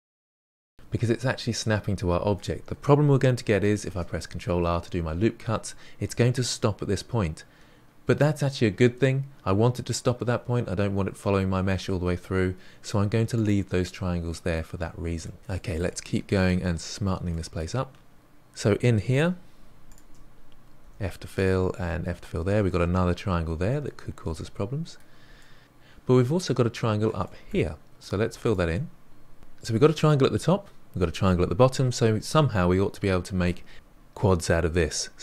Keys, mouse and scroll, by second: 2.4-3.8 scroll up 1, 3.8 ctrl+r, 13.9-16.7 middle drag, 16.7-17.2 scroll up 1, 17.2-18.1 shift+middle drag, 19.0 click, 19.8 shift+click, 20.8 f, 21.3 click, 21.7 f, 23.8-25.6 middle drag, 27.2-28.0 middle drag, 28.0 click, 28.4 shift+click.